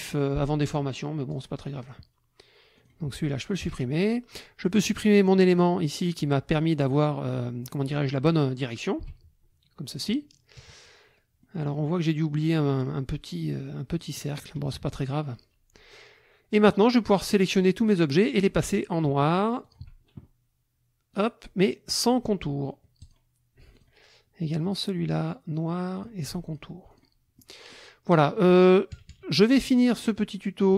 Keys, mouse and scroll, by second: 1.3 click, 1.8 click, 2.7 click, 3.6 Delete, 4.7 click, 5.5 click, 9.0 Delete, 10.5 KP_Subtract, 11.4 click, 13.9 click, 14.6 KP_Subtract, 17.0-18.6 drag, 19.6 shift+click, 21.1 click, 23.0 shift+click, 23.7 shift+click, 24.6 click, 26.0 click, 26.5 shift+click, 26.9 shift+click, 27.3 shift+middle click, 28.0 middle click, 28.9 KP_Subtract, 29.9 middle click, 30.3 middle click.